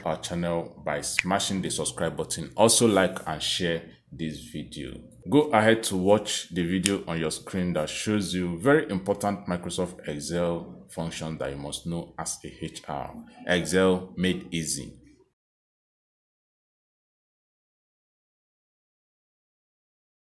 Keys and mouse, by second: 2.9 click.